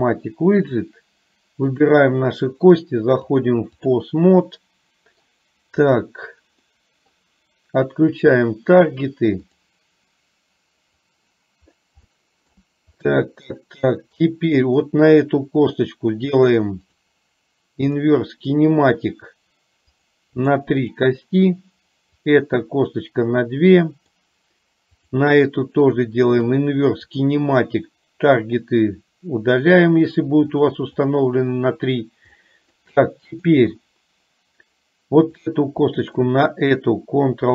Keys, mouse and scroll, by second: 3.3 click, 4.5 middle click, 5.9 click, 6.8 middle click, 9.5 click, 11.2 click, 12.0 shift+middle click, 13.0 middle click, 14.0 middle click, 16.9-18.0 drag, 20.0 click, 20.9 click, 22.3 click, 23.9 middle click, 25.0 click, 26.4 click, 30.0 click, 30.7 click, 31.0 click, 32.4-32.9 shift+middle drag, 33.2 middle click, 35.4 click, 36.0 shift+click.